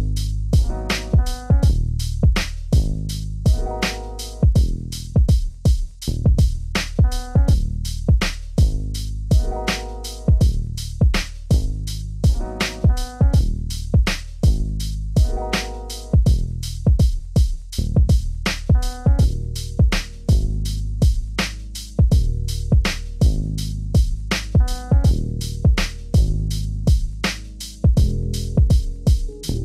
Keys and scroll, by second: 12.1 ctrl+g, 20.7 ctrl+space.